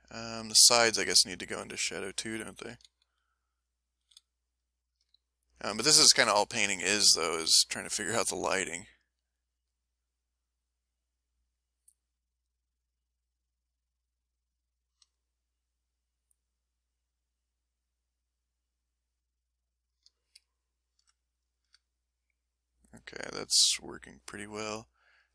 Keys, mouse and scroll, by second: 0.0 ctrl+scroll up 1, 0.5-0.9 ctrl+scroll up 1, 1.2-1.7 ctrl+scroll up 1, 2.6 s, 3.1 middle click, 4.0 f, 4.8 ctrl+click, 5.2 ctrl+click, 6.0-7.2 ctrl+shift+drag, 8.4 f, 9.2 click, 10.0-11.4 drag, 11.5-13.0 drag, 13.6 click, 14.0 click, 15.5-18.5 drag, 18.5-20.1 drag.